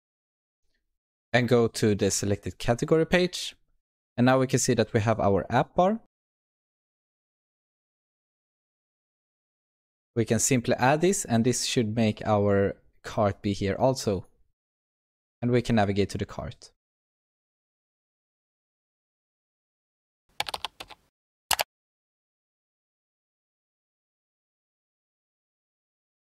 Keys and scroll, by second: 7.5 ctrl+v, 8.6 alt+Return, 13.0 ctrl+s.